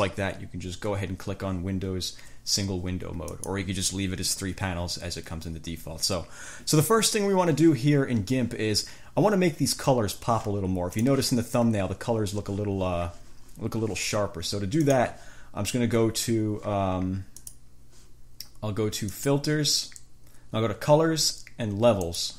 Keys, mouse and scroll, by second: 3.5 click, 11.2 click, 15.0 click, 17.6 click, 19.4 click, 22.2 click.